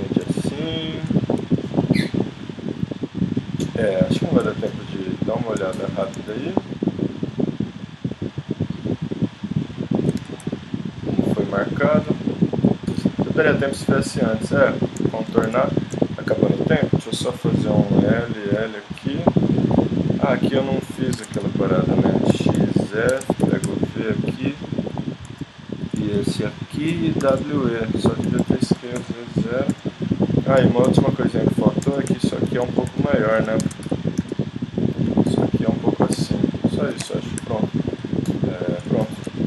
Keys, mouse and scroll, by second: 4.7-7.3 middle drag, 7.7 middle click, 8.9 middle click, 10.2 z, 11.0 middle click, 15.5 z, 17.2 l, 18.6 l, 21.1 ctrl+Tab, 22.3 x, 23.1 ctrl+Tab, 25.3 click, 25.3 z, 27.2 w, 28.4 s, 29.7 z, 30.7 g, 31.8 z, 32.2 middle click, 33.3 middle click, 33.6 ctrl+Tab, 34.2 z, 35.4 s, 36.1 middle click, 37.0 Tab.